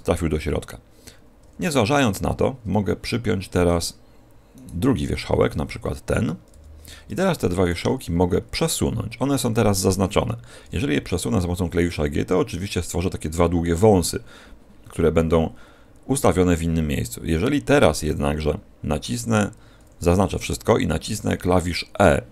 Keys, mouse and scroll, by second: 1.3 a, 1.9-2.6 scroll up 1, 2.6 middle click, 2.6 scroll up 4, 4.5 right click, 7.5 shift+right click, 7.5 p, 8.1 scroll down 5, 10.5 g, 18.9 click, 19.7 a, 19.9 a.